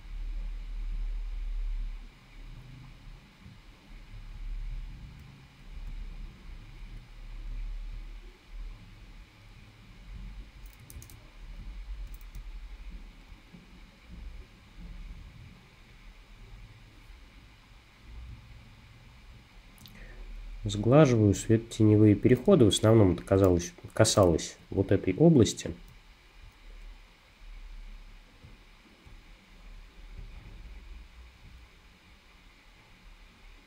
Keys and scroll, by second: 11.0 super+z, 11.6 z, 22.5 space.